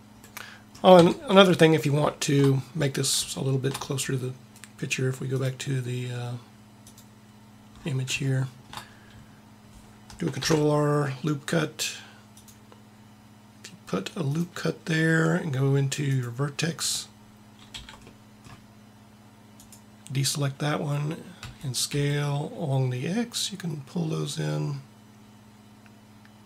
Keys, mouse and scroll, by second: 0.9 Tab, 5.3-7.1 drag, 10.4 ctrl+r, 16.1 click, 17.7 c, 21.3 s.